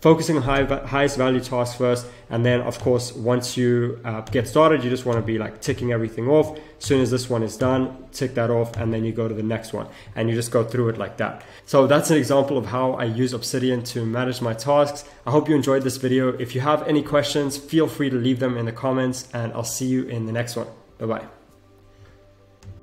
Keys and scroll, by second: 1.8 Return.